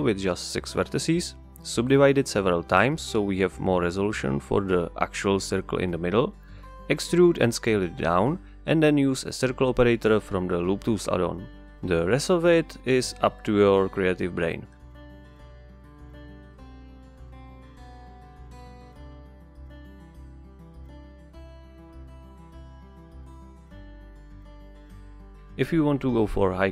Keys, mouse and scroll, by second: 0.6 drag, 1.1 click, 1.9 KP_6, 2.0 Return, 2.6 click, 3.1 Tab, 3.8-5.1 right drag, 5.1 drag, 5.8 click, 6.6 click, 7.8 e, 9.8 click, 10.1-11.6 right drag, 11.8 middle click, 12.1-12.6 scroll up 1, 12.6-18.3 typing, 13.0 click, 13.6 click, 14.8 alt+click, 15.7 click, 16.9 alt+click, 18.0 click, 19.1 click, 19.6-22.1 typing, 20.4 click, 20.9 click, 21.9 click, 22.5 click, 23.1 g, 23.2 click, 23.4-23.7 ctrl+scroll up 1, 23.7-24.5 drag, 24.5 shift+d, 25.4 KP_Enter, 25.8 shift+r, 26.5 Tab.